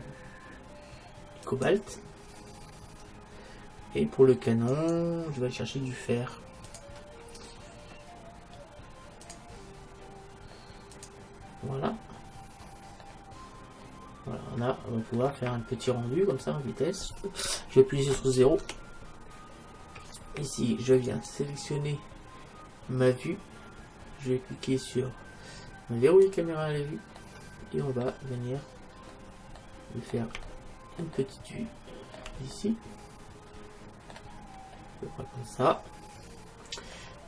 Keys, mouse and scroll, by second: 2.7-4.8 middle drag, 4.8-6.7 right drag, 6.7-8.4 drag, 9.3-11.0 drag, 12.4 middle click, 15.7 middle click, 16.5 middle click, 18.8 KP_0, 21.1-23.0 right drag, 26.3-28.0 drag, 27.2-37.2 middle drag.